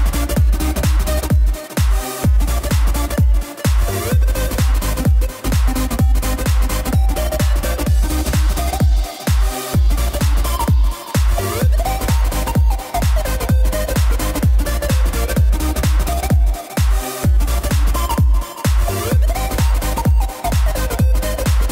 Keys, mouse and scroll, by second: 0.0-6.2 drag, 7.3 click, 7.9 click, 8.1-10.4 middle drag, 10.4 click, 11.6 click, 12.5 click, 16.2 click, 20.9-21.7 drag.